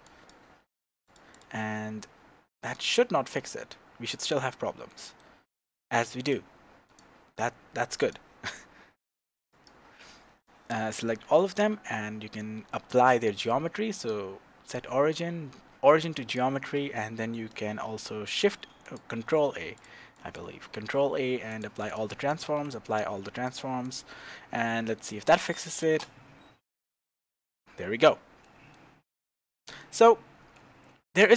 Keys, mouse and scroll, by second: 0.0 click, 0.6 s, 1.3 click, 1.6 scroll down 1, 2.6-2.9 drag, 2.9-6.2 middle drag, 6.2 click, 6.9 click, 8.0 click, 9.5 click, 10.4 click, 10.9-14.0 middle drag, 14.0-19.0 drag, 18.0 shift+a, 19.2 ctrl+a, 19.8 click, 20.1 click, 20.7 ctrl+a, 21.9 click, 22.2 click, 22.4 ctrl+a, 23.8 click, 24.8-31.3 middle drag, 25.8 shift+space, 25.9 shift+space, 30.5 scroll up 2.